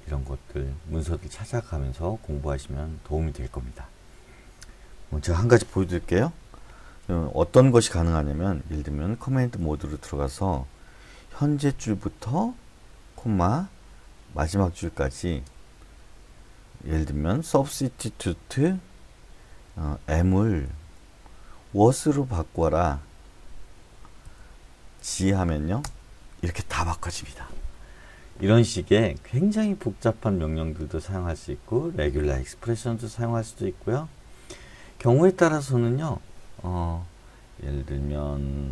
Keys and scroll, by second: 9.5 shift+;, 11.6 ., 13.2 /, 14.5-15.2 typing, 17.5-22.5 typing, 24.2-25.0 typing, 25.8 Return.